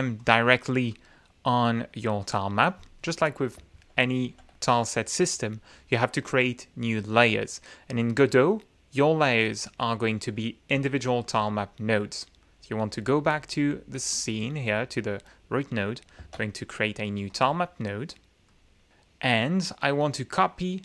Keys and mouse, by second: 0.1 click, 0.9 click, 3.7 ctrl+z, 13.2 click, 16.1 ctrl+a, 17.2 click, 18.4 click.